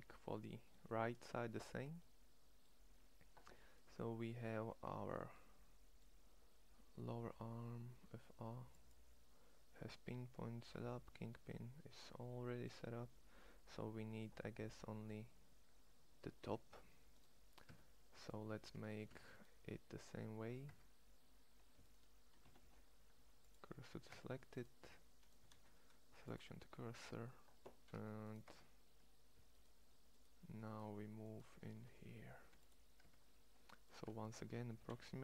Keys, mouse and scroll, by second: 5.4-13.2 middle drag, 17.4 Tab, 18.9 Tab, 20.6 Tab, 22.3 shift+s, 24.0 Tab, 24.7 Tab, 25.2 shift+s, 27.7 Tab, 28.5 Tab, 31.7 shift+s, 32.9 Tab, 33.9 Tab, 34.4 g.